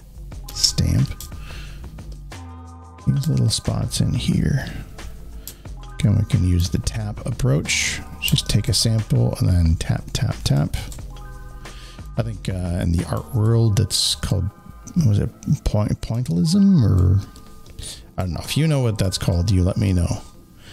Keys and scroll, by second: 0.4 s.